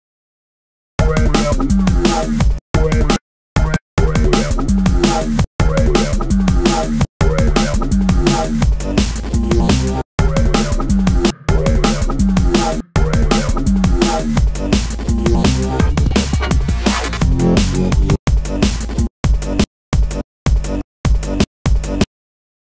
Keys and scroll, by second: 9.1 space, 11.9 space, 17.2 space.